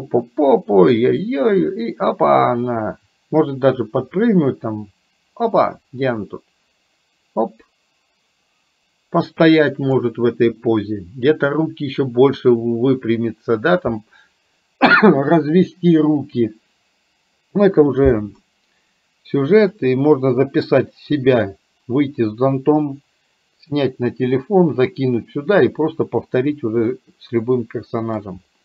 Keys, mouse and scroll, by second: 19.8-21.5 drag, 27.0-28.2 middle drag.